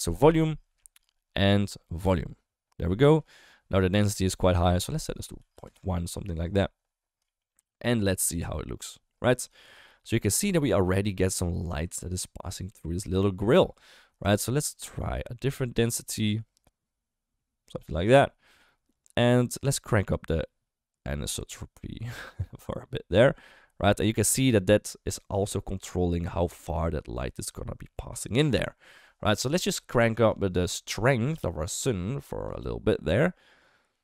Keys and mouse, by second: 0.4-2.0 drag, 3.3 middle click, 4.5-5.6 drag, 7.3 shift+middle drag, 8.2 ctrl+b, 9.5 shift+middle drag, 14.3-17.9 shift+drag, 18.6-26.5 drag, 30.2 click, 32.5-34.0 drag.